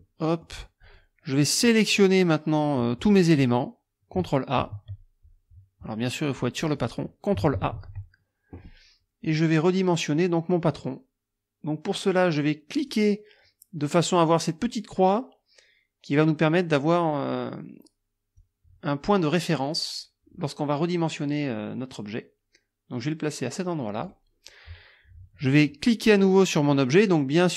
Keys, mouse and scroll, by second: 0.0 click, 0.9 click, 4.6 ctrl+a, 6.7 click, 7.6 ctrl+a, 12.8 click, 18.4-24.3 drag.